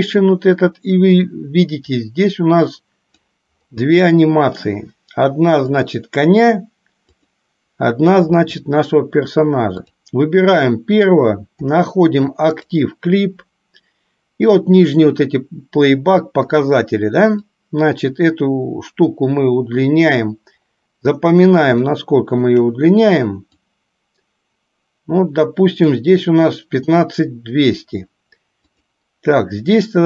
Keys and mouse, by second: 2.2-3.4 drag, 4.1 middle click, 6.1 click, 7.1 click, 9.9 click, 12.6 click, 17.5-20.3 drag, 22.0 shift+middle click, 23.9-26.1 drag.